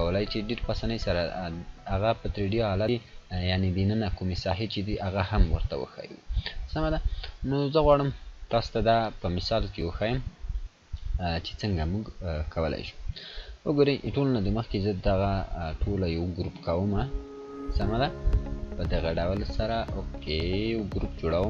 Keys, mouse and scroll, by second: 3.5 scroll up 1, 4.0-6.5 drag, 6.6-7.1 scroll down 1, 7.4-8.0 click, 9.7 click, 12.0 click, 14.2 scroll down 1, 15.3-15.9 click, 16.7 right click, 18.4-19.3 drag, 19.9 right click.